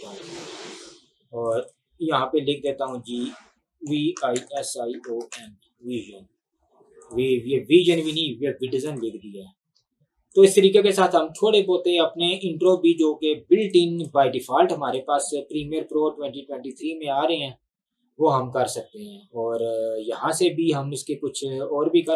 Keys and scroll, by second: 3.7-5.9 typing.